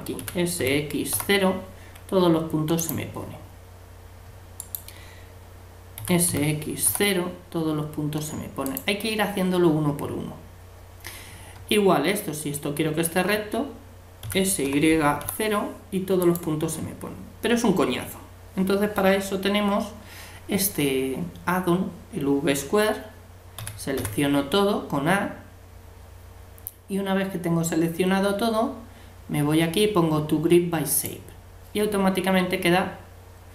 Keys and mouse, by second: 0.2 s, 4.6-6.5 right drag, 6.0 s, 12.4-14.2 right drag, 14.2 s, 23.6 a, 24.0 a, 30.9-32.7 drag.